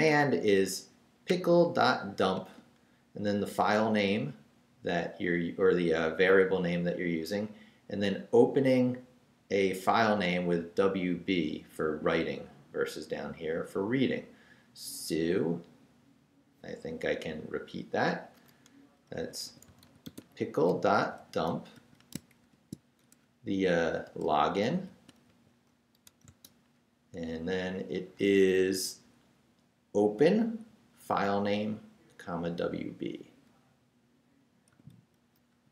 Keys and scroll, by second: 18.9-22.4 typing, 23.9-26.0 typing, 34.7-35.7 typing.